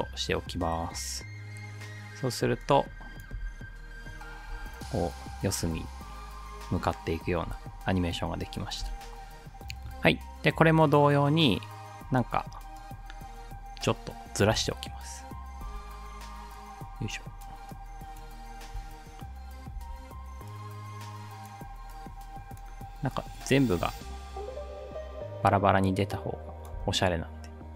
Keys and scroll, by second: 3.4 space, 4.6 space, 5.7 space, 7.4 space, 8.9 space, 14.6 space, 15.6 space, 18.7 space, 19.8 space, 23.9 space, 26.8 space.